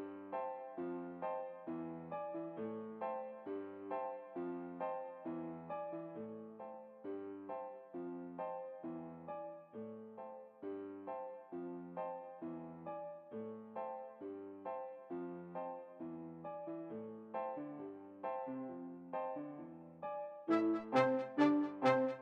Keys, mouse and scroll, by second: 3.1-4.5 right drag, 3.5 s, 9.1 alt+a, 14.1 Escape, 14.9-16.5 right drag, 16.3 s, 20.2-21.6 right drag, 20.5 s.